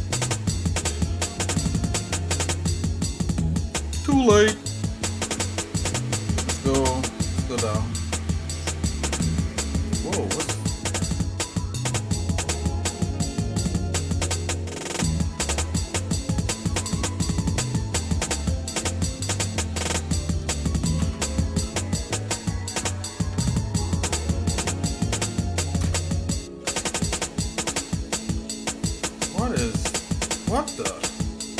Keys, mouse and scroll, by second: 0.5 shift+middle click, 1.7 shift+middle click, 2.4 scroll down 1, 2.8 middle click, 3.9 middle click, 4.4 middle click, 4.7 middle click, 5.1 middle click, 5.5 middle click, 5.9 middle click, 6.2 middle click, 6.6 middle click, 6.9 middle click, 7.3 middle click, 7.6 middle click, 7.9 middle click, 8.3 middle click, 9.2 scroll up 1, 9.9 click, 10.4 Tab, 11.6-14.7 shift+middle drag, 16.8 click, 17.5-18.0 scroll up 4, 21.0 ctrl+i, 23.1 ctrl+Tab, 25.8 ctrl+KP_Add, 26.6-28.3 shift+middle drag, 28.5 scroll down 2, 29.0 shift+middle click, 29.8 click, 31.0 l.